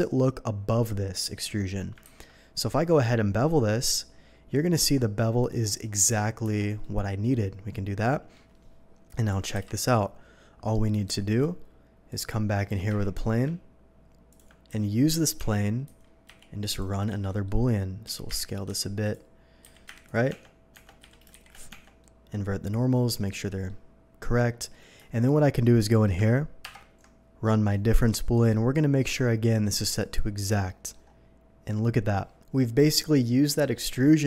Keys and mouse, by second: 2.0 ctrl+b, 2.0-6.5 drag, 6.5 Tab, 6.5 drag, 6.8-16.0 drag, 11.1 shift+a, 12.7 g, 12.9 y, 14.7 s, 15.4 Tab, 15.8-19.8 typing, 16.0 Tab, 16.6-18.4 drag, 18.6-23.8 drag, 20.3 Tab, 20.7 Tab, 21.0 a, 21.3 shift+n, 21.7 Tab, 23.9-24.2 drag, 24.5-25.0 drag, 26.6 ctrl+KP_Subtract, 32.3-34.2 drag.